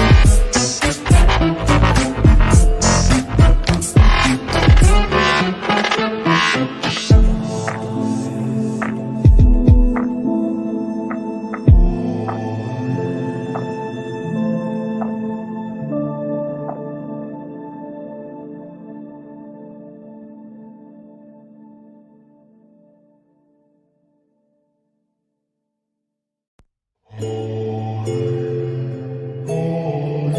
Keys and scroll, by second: 15.2 Delete, 20.1 g.